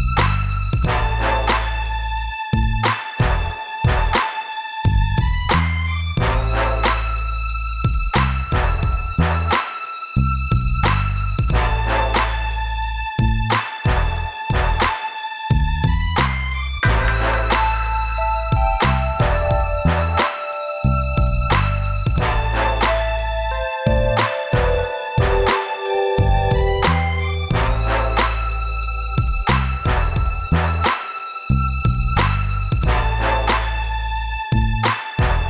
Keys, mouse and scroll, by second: 2.4 click, 3.2 click, 4.2 click, 5.4 click, 6.1 click, 7.1 click, 8.1 click, 8.6 click, 9.3 click, 9.8 scroll down 2, 12.7 click, 14.4 click, 15.5 click, 16.5 click, 18.7 click, 19.6 click, 20.5 click, 21.6 click, 21.7 click, 22.5 click, 23.3 click, 25.7-26.2 scroll down 1, 25.7 ,, 28.2 click, 30.2 click, 31.6 click, 33.4-34.3 scroll up 2, 34.3 click, 35.1 click.